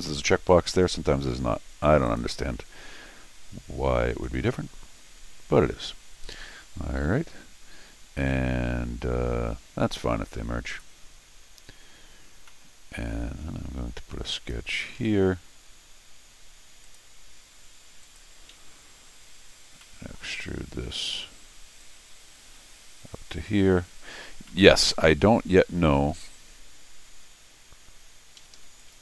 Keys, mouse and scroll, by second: 2.0 click, 10.7 click, 12.5 middle click, 14.3 click, 15.0 c, 16.8 click, 18.0 click, 19.3 scroll down 1, 19.8 middle click, 21.8-23.3 drag, 24.4 middle click, 28.4 Escape, 28.5 Escape, 28.8 click.